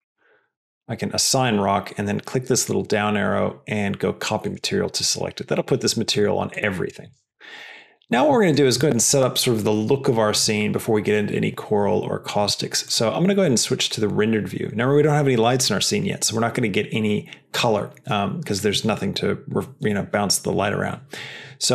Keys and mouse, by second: 0.6 click, 2.6-4.5 drag.